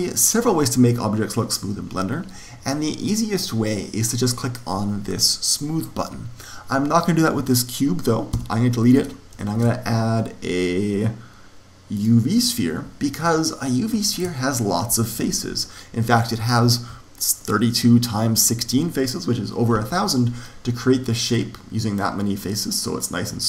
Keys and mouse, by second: 8.3 x, 9.5 shift+a, 13.2-14.9 middle drag, 23.0-23.4 middle drag.